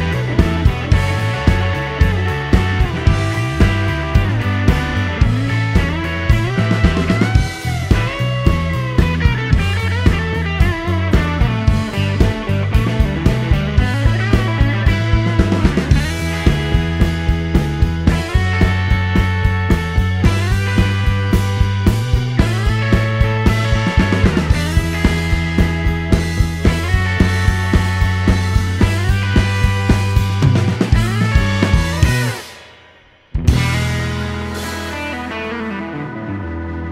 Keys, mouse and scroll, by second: 1.0 shift+r, 2.0 shift+Return, 3.6 click, 4.1 a, 6.1 6, 6.6 Return, 8.5-9.7 drag, 11.4-12.7 drag, 14.4 middle click, 14.9 l, 15.9 click, 16.6 click, 17.0 right click, 17.6 click, 19.1 t, 21.1 click, 21.9-22.9 middle drag, 24.7 scroll down 1, 24.9 middle click, 26.4 middle click, 28.0 shift+h, 29.8 3, 30.2 Return, 31.3 middle click, 32.8-34.1 drag, 34.3 middle click.